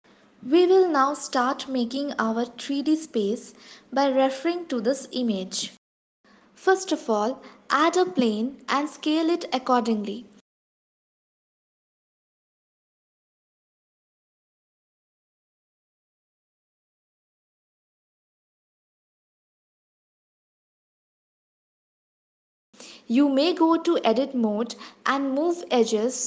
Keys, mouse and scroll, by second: 2.8 s, 6.9 shift+a, 9.9 s, 12.2 s, 21.9 Tab, 25.3 click.